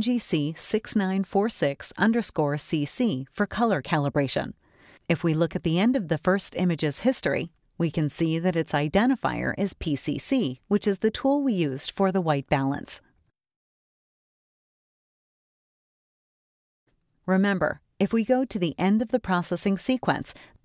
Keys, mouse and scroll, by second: 0.3-3.1 typing, 4.5 Return, 7.1 click, 7.7 click, 9.1 click, 11.7 click.